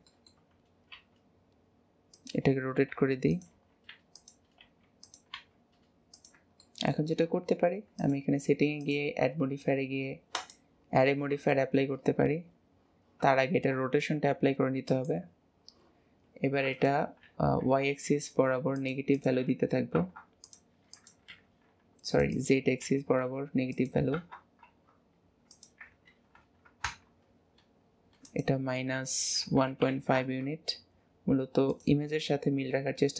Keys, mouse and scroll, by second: 0.1 shift+middle click, 0.4 scroll up 3, 1.0 r, 2.9 r, 3.5 g, 4.6 r, 5.3 g, 6.6-8.0 shift+middle drag, 8.0 click, 8.8-11.4 drag, 11.4-13.4 shift+middle drag, 13.4 ctrl+a, 16.7-19.0 drag, 19.1-20.5 drag, 20.9-22.2 drag, 22.3-31.2 drag, 31.8-33.1 drag.